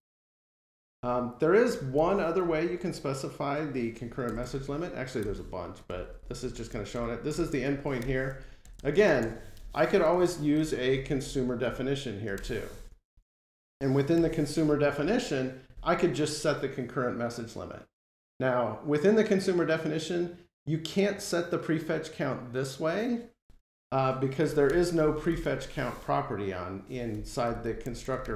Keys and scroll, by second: 7.8 Delete, 12.2 Return, 13.1 alt+super+Return, 14.3 F12, 27.0 Escape, 28.0 Delete.